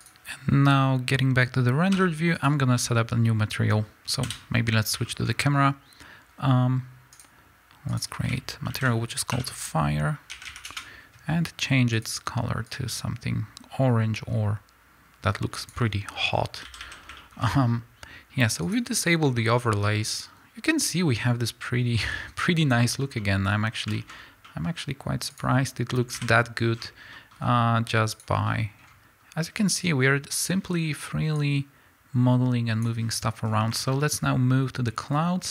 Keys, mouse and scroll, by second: 0.0 Return, 0.0-1.4 drag, 1.4 scroll down 1, 2.6 z, 4.2 KP_0, 5.1-7.2 middle drag, 5.2-7.2 scroll up 2, 7.2 drag, 10.7-12.7 drag, 10.8 Return, 16.3 scroll down 1, 16.7 a, 17.2-18.6 middle drag, 18.6 click, 19.0-19.4 scroll down 2, 19.4 middle click, 19.5-21.0 scroll up 2, 21.0-24.2 scroll up 1, 24.2-25.4 scroll up 1, 25.4 click, 26.4 KP_Decimal, 28.2 click, 30.4 click, 31.4-33.9 drag, 33.4-33.9 scroll down 2, 33.9-35.5 middle drag, 35.0-35.5 scroll up 2.